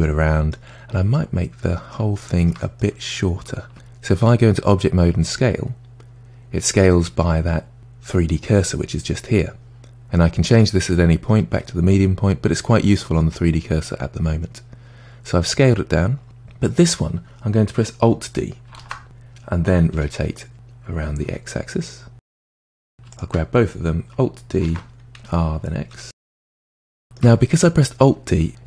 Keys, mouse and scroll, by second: 0.8-1.1 scroll down 2, 1.1-3.7 middle drag, 3.7 Tab, 5.0 s, 10.4-13.0 drag, 13.0-15.0 middle drag, 18.8 alt+d, 22.6-23.2 middle drag, 23.2 shift+click, 24.7 alt+d, 26.0 r, 27.0 shift+middle click, 27.4-28.5 scroll up 2.